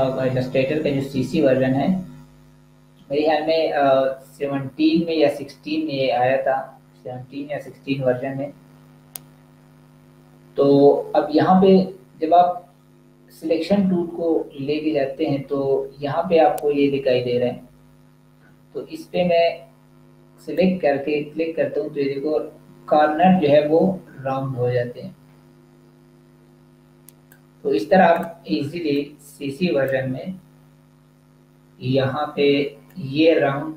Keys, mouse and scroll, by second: 14.5-15.1 scroll up 1, 15.1-17.6 scroll down 1, 20.4 click, 32.8 click.